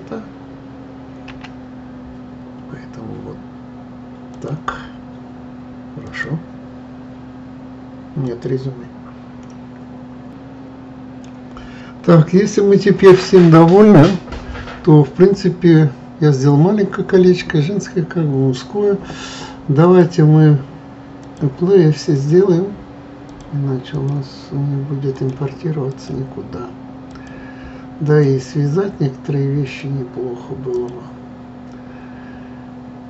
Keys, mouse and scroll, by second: 1.3 s, 19.8 click, 21.2 click, 22.1 click, 23.3 click, 23.9 click, 25.1 click, 25.9 click, 27.1 click, 28.1 click, 29.6 click, 30.7 click.